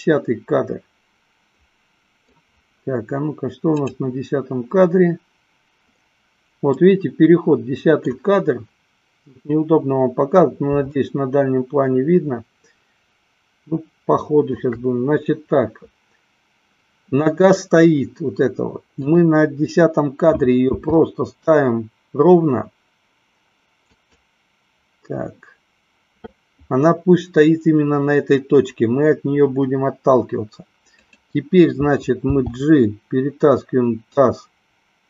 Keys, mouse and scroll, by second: 4.2 click, 7.1-8.4 middle drag, 11.1-14.6 shift+middle drag, 21.1 r, 30.9 click, 32.6 g.